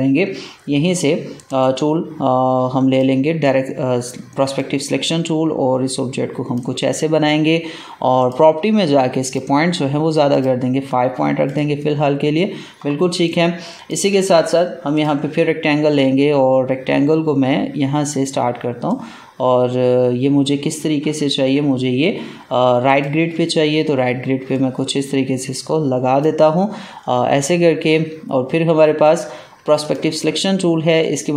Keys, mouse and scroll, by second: 1.4 right click, 2.8-8.1 drag, 13.1 space, 13.6 space, 17.1 click, 18.8-21.1 drag, 21.1 ctrl+z, 22.7 click, 23.9-28.9 drag, 28.9 right click, 29.7-31.3 drag.